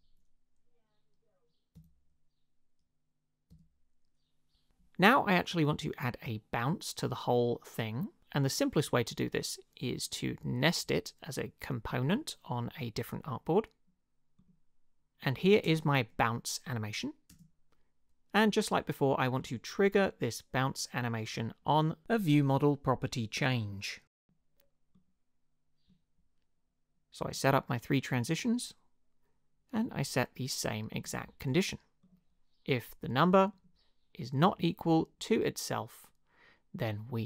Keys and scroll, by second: 1.7 Up, 3.5 Up, 15.7 space, 17.3 space.